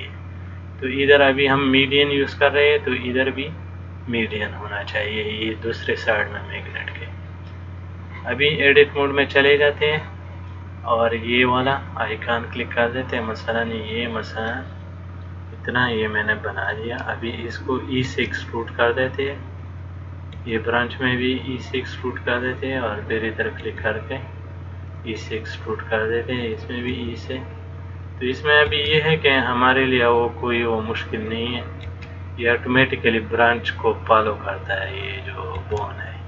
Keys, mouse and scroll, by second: 9.1 click, 11.5 click, 15.4 middle click, 18.3 e, 20.6 e, 22.8 click, 23.8 e, 26.7 click, 27.1 e, 28.9 e, 32.1 e, 35.2 click, 35.8 e.